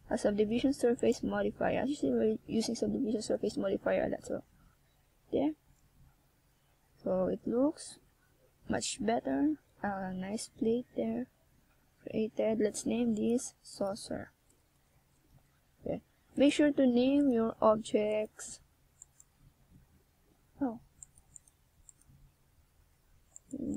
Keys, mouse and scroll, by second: 0.6 shift+right click, 1.5 right click, 4.7 x, 8.0 shift+s, 11.1 right click, 13.1 shift+s, 14.6-15.0 scroll up 4, 15.6 ctrl+scroll down 2, 16.0 scroll up 1.